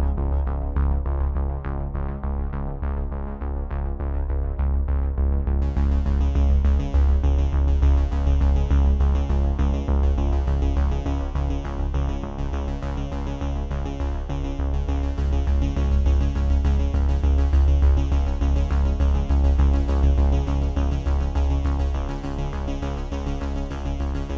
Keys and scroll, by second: 15.9 ctrl+F5.